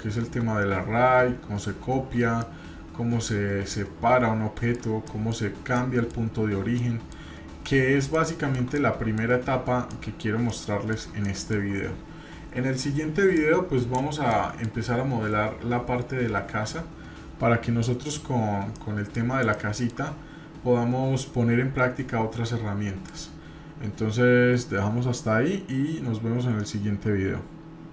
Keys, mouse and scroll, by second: 2.4-4.8 middle drag, 5.0-5.4 shift+middle drag, 5.7 middle click, 6.4 scroll down 1, 6.8 shift+middle click, 8.1-8.5 shift+middle drag, 8.7-9.1 middle drag, 9.3 scroll up 1, 9.9-10.3 shift+middle drag, 10.4 middle click, 11.2 shift+middle click, 13.4 click, 14.3-14.7 middle drag, 18.7 middle click, 19.5 shift+middle click.